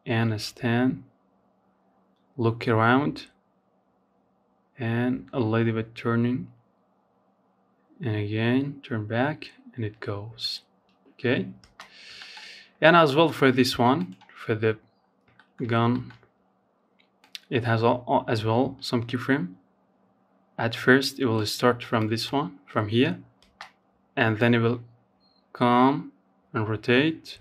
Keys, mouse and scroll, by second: 8.0-8.4 scroll down 3, 9.8 space, 10.0-10.4 scroll up 3, 10.4 shift+middle click, 10.6-11.0 scroll down 2, 11.0-12.1 scroll up 4, 11.2 shift+middle click, 12.1 click, 12.8-13.5 scroll down 6, 13.5 shift+middle click, 13.8 scroll up 3, 14.1-15.4 shift+middle drag, 15.4-18.5 drag, 20.1-21.6 drag, 21.6 space, 22.6-25.6 drag, 26.5 space, 27.0 space.